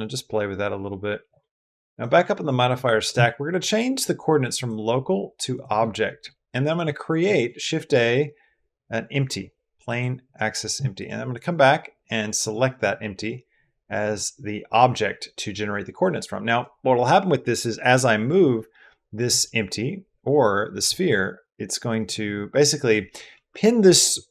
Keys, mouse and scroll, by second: 1.3 middle drag, 1.7 middle click, 4.3-5.4 middle drag, 5.9 middle click, 7.1 shift+a, 10.8 click, 12.2 click, 20.6 g, 22.1 x, 23.1 Escape.